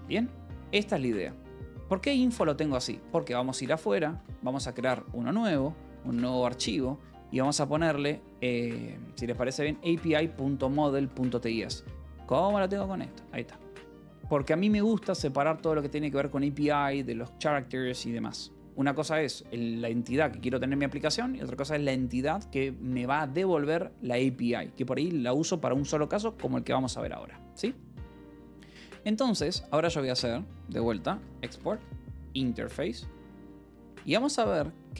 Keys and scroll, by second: 0.0 Escape, 1.3 k, 2.0 j, 2.5 k, 2.9 :, 4.0-6.5 typing, 4.6 Escape, 8.5-11.7 typing, 12.8 t, 13.0 Escape, 13.4 Return, 13.7 y, 15.3 Return, 29.9-34.4 typing.